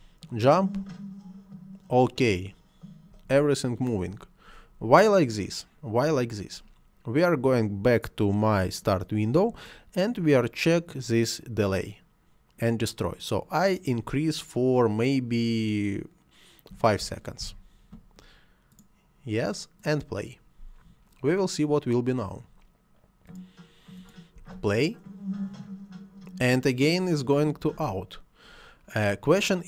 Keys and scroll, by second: 3.1 Escape, 16.7 5, 17.4 Return, 24.4 space, 27.7 Escape.